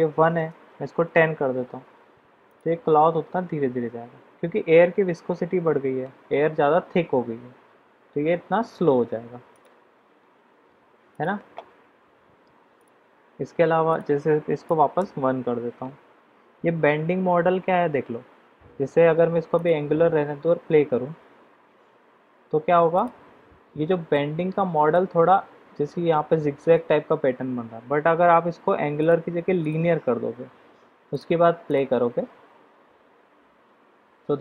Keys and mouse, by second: 2.4 click, 9.7 drag, 11.1 click, 13.8-15.4 drag, 19.5 click, 23.1 click, 24.1-24.9 middle drag, 29.0-29.7 drag, 31.1 click, 31.6 click.